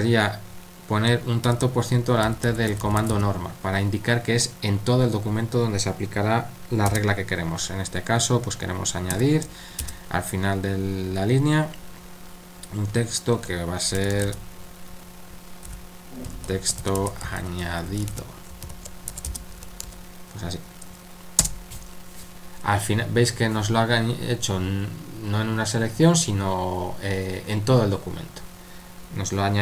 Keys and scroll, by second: 1.5-3.6 typing, 9.1 shift+a, 14.0 typing, 15.4-19.8 typing, 21.4 Return.